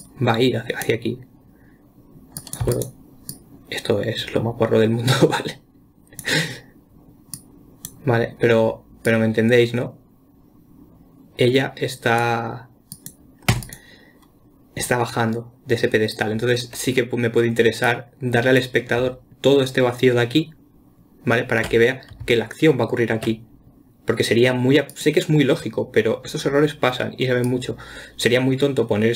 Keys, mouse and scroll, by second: 2.8 click, 3.0 x, 3.7-6.7 drag, 7.8 click, 9.5-12.6 drag, 13.4 click, 13.9 x, 18.3-21.4 drag, 25.3 click, 26.7-27.9 scroll down 1, 27.9 click.